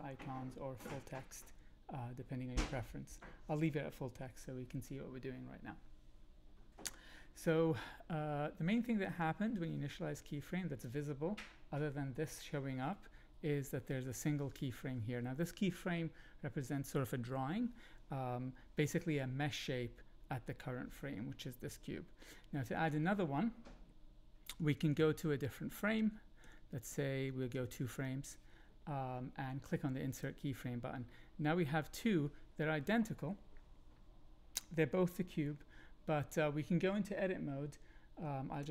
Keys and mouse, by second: 9.1-10.9 drag, 24.6 Right, 24.7 Right, 24.8 Right, 26.0 Left, 26.4 Left, 26.9 Left, 27.3 Right, 27.5 Right.